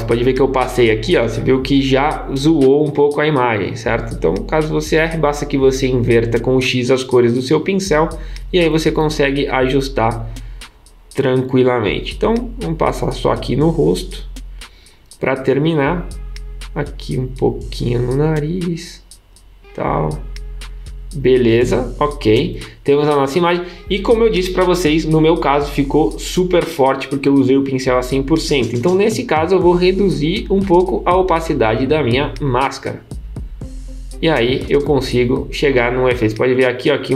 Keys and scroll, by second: 3.3 x, 8.3 x.